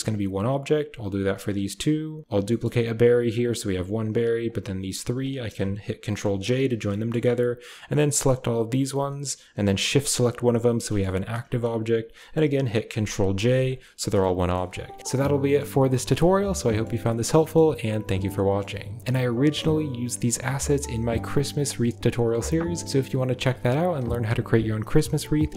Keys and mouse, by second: 0.0 a, 0.6 click, 1.3 shift+click, 2.2 shift+d, 3.2-3.9 typing, 3.6 click, 4.3-4.7 drag, 5.0 shift+click, 6.1 ctrl+j, 6.4 a, 6.8 shift+middle click, 7.9 click, 10.7 shift+click, 12.0 click, 12.7 ctrl+j, 12.7-13.8 typing, 13.5 click, 14.3 shift+middle drag, 15.0 a, 15.0 z, 15.3 shift+middle click, 16.2-16.7 middle drag, 17.3 shift+click, 18.3 click, 19.0 a.